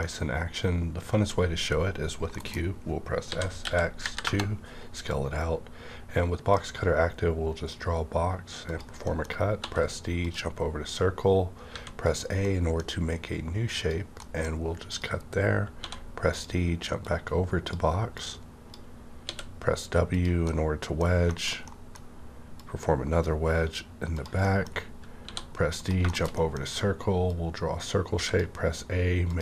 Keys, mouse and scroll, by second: 0.0-2.4 middle drag, 2.4-3.9 typing, 4.2 KP_Enter, 6.5-9.0 drag, 9.0 middle click, 9.3 scroll up 1, 9.8 d, 10.2 click, 10.9-12.4 drag, 11.7 a, 12.4-14.2 middle drag, 13.8 click, 14.2 middle click, 14.9 click, 15.7 d, 16.3 click, 17.0-20.1 drag, 19.2 w, 20.4 middle click, 20.5 middle click, 20.5 click, 21.2 shift+middle click, 22.5-24.4 drag, 24.4 middle click, 24.7-25.0 scroll up 1, 25.2 d, 25.8 click, 26.0 middle click, 26.3 middle click, 27.3-29.3 drag, 28.1 a.